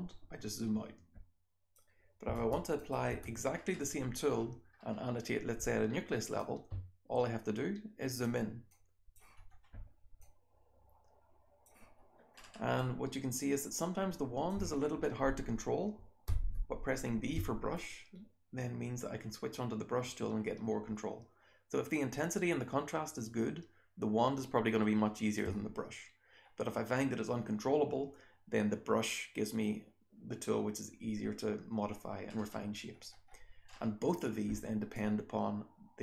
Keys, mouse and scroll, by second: 1.9-3.1 scroll up 2, 2.4 BackSpace, 2.7 click, 3.0 BackSpace, 6.3-8.1 drag, 7.2-8.1 scroll up 1, 8.1-8.7 scroll up 1, 8.6 click, 9.3-10.2 scroll down 2, 10.2-11.6 drag, 10.2-11.6 scroll down 1, 11.6-12.3 scroll down 1, 12.3-14.4 scroll up 2, 12.7-14.4 drag, 14.4 scroll up 1, 14.6-15.2 scroll down 1, 16.2 b, 16.6-17.3 scroll down 1, 17.7-25.3 alt+drag, 25.3-25.9 scroll down 1, 28.6-29.9 scroll down 1, 29.9-32.2 scroll down 1, 32.2-32.8 scroll up 1, 32.8-33.6 scroll down 1, 33.6-36.0 scroll up 2, 34.9-36.0 drag.